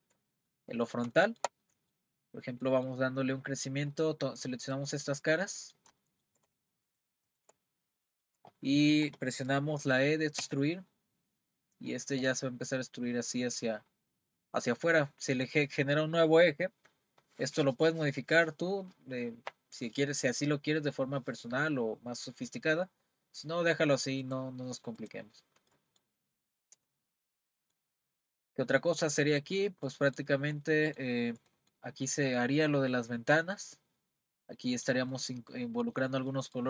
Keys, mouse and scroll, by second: 2.2-2.6 scroll up 1, 2.6-3.2 middle drag, 3.2-3.5 scroll up 1, 3.5-4.7 middle drag, 4.7 click, 5.1-5.6 scroll up 1, 5.6-6.9 middle drag, 6.9 shift+click, 7.3 shift+click, 7.7-8.0 scroll down 1, 8.0-10.4 middle drag, 10.4 e, 25.0 click, 25.3-25.7 scroll down 2, 25.7-26.5 middle drag, 26.5-27.0 scroll up 3, 27.0-27.5 scroll down 2, 27.5 middle click, 28.0-28.7 scroll up 4, 28.8-34.5 middle drag, 34.7-36.0 middle drag, 36.0-36.3 scroll down 3, 36.3-36.6 middle drag.